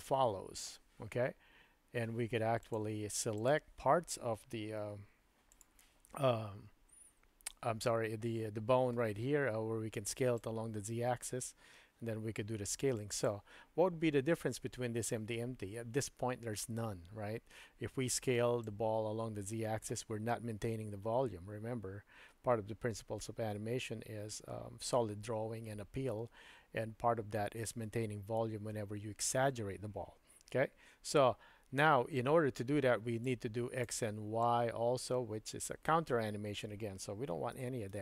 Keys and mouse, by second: 2.6 click, 4.8 g, 10.4-13.3 drag, 18.6-19.9 drag, 33.4 click, 34.6-35.6 drag, 37.6 super+z, 37.9 super+z.